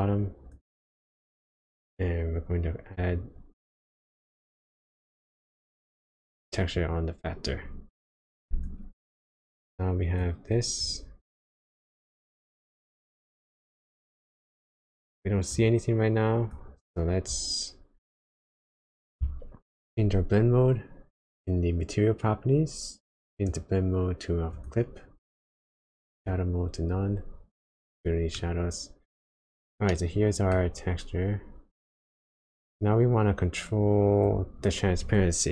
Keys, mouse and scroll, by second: 1.0 click, 3.1 click, 6.8 click, 8.6 ctrl+shift+click, 9.3 click, 10.8 click, 11.7 click, 14.5 click, 15.5 click, 20.4 click, 23.3 click, 25.4 click, 27.6 click, 28.3 middle click, 29.9 middle click, 32.4 click, 35.0 click.